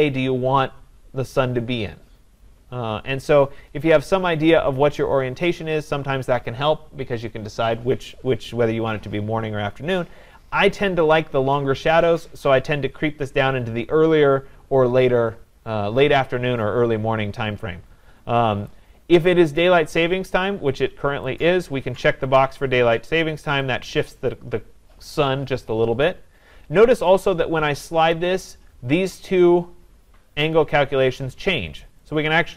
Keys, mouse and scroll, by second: 18.7 click, 21.4 click, 26.4 click, 28.1-32.5 drag.